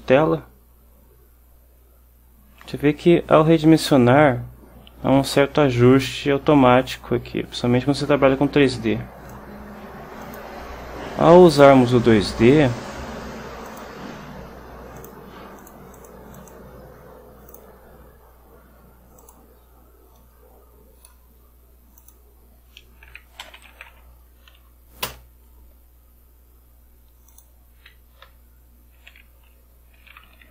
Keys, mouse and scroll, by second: 0.0-9.6 drag, 10.3 click, 11.6 click, 13.7 click, 15.1 click, 15.7 click, 16.1 click, 16.5 click, 17.6 click, 19.3 click, 20.3-21.3 drag, 22.1 click, 23.3-24.5 typing, 25.1 Return, 27.4 click, 29.8-30.5 typing.